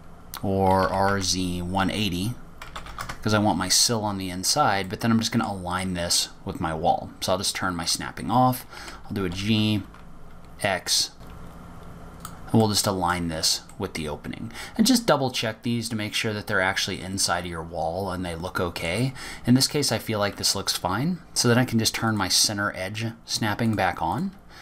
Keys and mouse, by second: 2.2 r, 6.3-7.0 middle drag, 10.2 g, 14.0-14.4 middle drag, 14.4 drag, 15.1-20.3 middle drag, 23.4-24.6 drag.